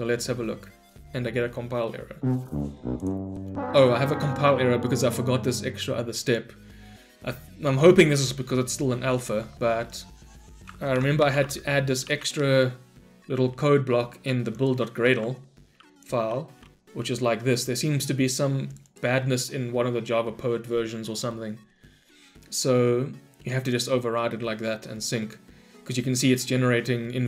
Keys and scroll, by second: 11.0 ctrl+shift+n, 12.1 ctrl+shift+n, 15.0 ctrl+v.